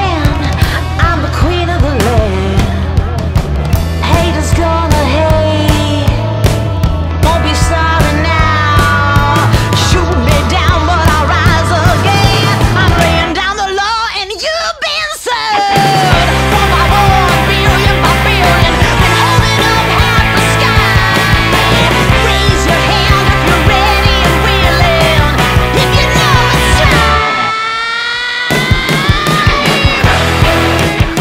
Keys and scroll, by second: 9.9 space, 13.2 Escape, 22.5 F2, 25.2 F3, 30.7 space.